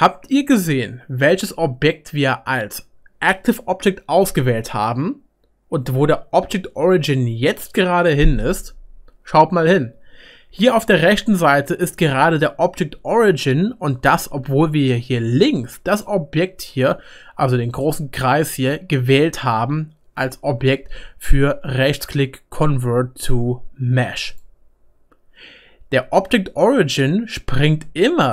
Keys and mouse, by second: 0.7-2.0 middle drag, 11.4-14.7 drag, 14.2 ctrl+z, 14.7-28.3 right drag, 15.9 click, 15.9 middle click.